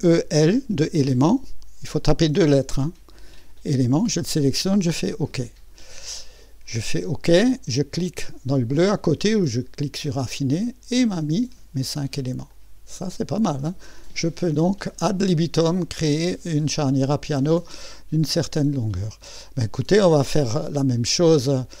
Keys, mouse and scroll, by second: 0.0 typing, 3.6 click, 5.0 click, 7.3 click, 11.2-13.3 right drag, 12.5-13.7 drag, 13.8-15.6 scroll up 1, 15.6-18.0 scroll up 1, 18.0-19.6 drag.